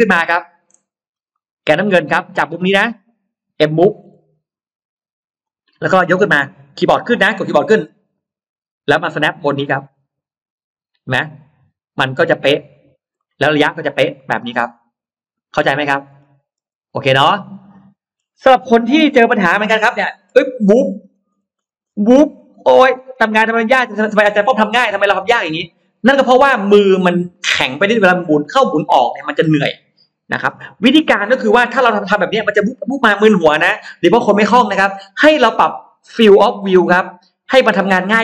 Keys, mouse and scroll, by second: 0.9-1.3 scroll up 1, 1.1 middle click, 1.7-2.3 scroll up 2, 2.7-3.0 scroll down 1, 5.3 click, 7.7 Up, 8.9 middle click, 12.5 click, 13.0 middle click, 13.5 scroll down 1, 14.0-15.3 middle drag, 15.3 scroll down 1, 15.5-16.3 scroll up 1, 16.5 space, 16.7 click, 17.0-17.7 scroll up 2, 17.5 middle click, 18.4-19.9 scroll up 3, 20.1-20.7 scroll down 2, 20.9-22.4 scroll up 6, 22.4-22.7 scroll down 2, 22.9-23.5 scroll up 2, 23.7-24.3 scroll down 4, 24.3 middle click, 24.5-24.9 scroll up 2, 25.0 scroll down 2, 25.7-26.8 scroll up 4, 36.6 click.